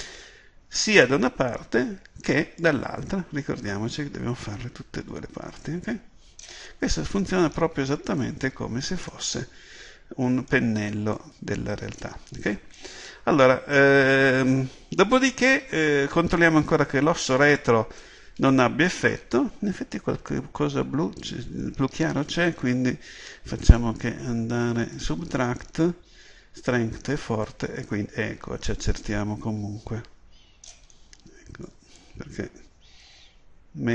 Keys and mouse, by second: 9.9-11.2 middle drag, 11.2-12.9 drag, 13.0 middle click, 13.1 KP_7, 17.5-22.9 drag, 23.7-29.4 drag, 32.0-33.8 drag.